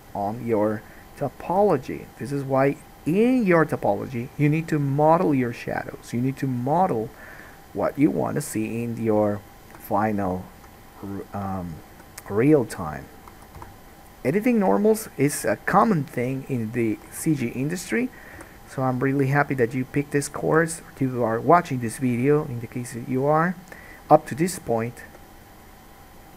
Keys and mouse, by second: 1.5 middle click, 1.5 right click, 1.7 g, 6.5 middle click, 6.5 right click, 7.1 alt+a, 10.8 2, 12.1 g, 13.5 alt+a, 14.2 1, 14.8 middle click, 15.2-17.8 drag, 15.9 g, 17.3 alt+a, 17.8 middle click, 17.9-26.3 drag, 18.5 g, 20.7 alt+a, 24.0-26.3 middle drag, 24.0-26.3 right drag, 25.3 g.